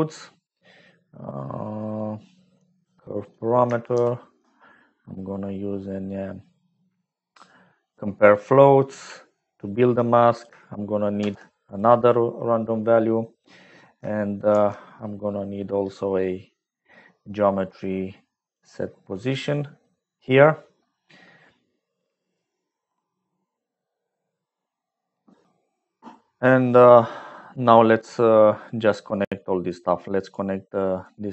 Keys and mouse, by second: 3.9 shift+a, 8.9 click, 10.3 click, 11.2 shift+d, 12.8 click, 14.5 shift+a, 29.7 click, 30.9 click.